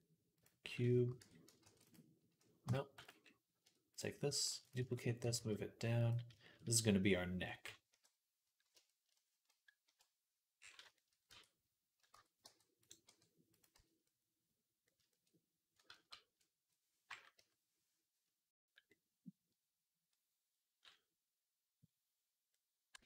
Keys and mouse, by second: 0.7 shift+right click, 1.0 Tab, 1.4 ctrl+r, 1.6 right click, 1.8 middle click, 2.5 Tab, 2.8 x, 3.0 middle click, 3.7 click, 3.8 middle click, 4.3 shift+d, 5.1 g, 7.7 KP_3, 9.7 KP_Decimal, 11.9 Tab, 12.3 g, 12.9 r, 13.3-14.7 drag, 13.6 z, 15.7 ctrl+z, 17.2 KP_3, 18.6-23.0 middle drag, 22.8 b.